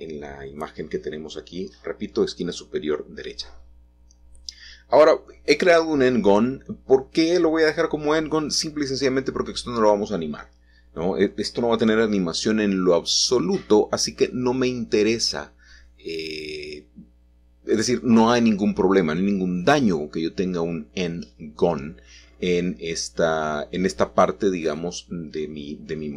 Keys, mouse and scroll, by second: 0.0 middle click, 1.6 middle click, 6.1 shift+middle click, 8.5 e, 10.7 Escape, 11.5 middle click, 14.0 e, 15.0 click, 17.4 middle click, 18.5 ctrl+z, 19.0 middle click, 19.1 middle click, 19.6 middle click, 20.3 middle click, 25.6 middle click.